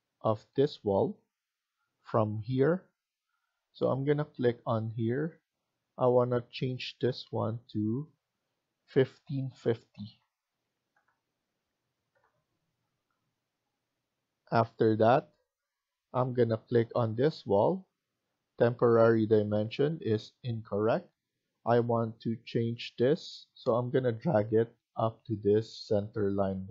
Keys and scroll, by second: 9.9-10.9 typing, 12.0 Return, 15.6-16.4 typing, 16.9 Return.